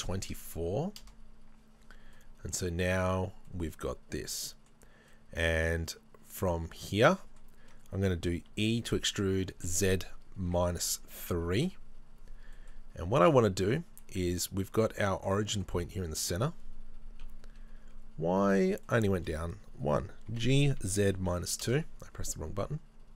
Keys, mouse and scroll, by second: 1.1 KP_Enter, 1.8 scroll down 2, 2.2-14.0 middle drag, 3.1-3.4 scroll up 2, 3.4 scroll down 2, 8.5 e, 11.7 KP_Enter, 17.3 KP_3, 18.5-18.9 scroll up 1, 18.9 shift+middle click, 21.7 g, 21.7 KP_Enter.